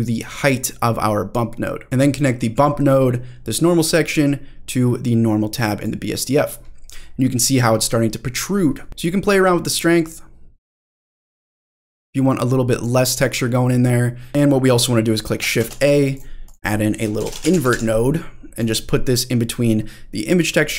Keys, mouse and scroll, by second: 3.8-5.9 drag, 6.7-7.5 scroll up 4, 7.5-8.3 scroll down 1, 8.3-8.9 scroll down 2, 8.9 middle drag, 8.9 scroll up 2, 10.9-12.8 drag, 14.3 middle click, 14.3-15.4 scroll down 3, 15.5 shift+a.